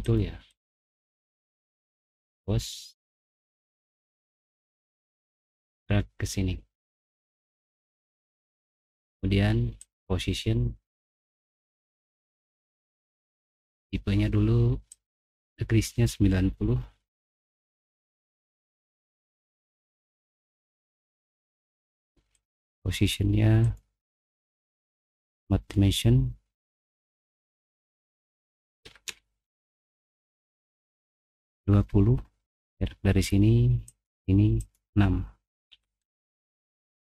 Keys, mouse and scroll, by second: 0.1 middle click, 0.4 click, 0.6 click, 1.9 click, 2.1 click, 3.6 click, 4.9-7.3 drag, 11.5 middle click, 11.9 middle click, 12.3 middle click, 13.5 click, 14.9 click, 17.3 typing, 18.0 Return, 19.2 middle click, 19.2 scroll down 1, 19.9 middle click, 20.2 typing, 20.2 middle click, 22.3 click, 23.6 click, 25.0 click, 26.6 click, 27.7 click, 28.6-29.5 typing, 31.1 middle click, 31.1 scroll up 1, 32.5 click, 33.8 click, 34.5 click, 35.8 6, 36.0 Return.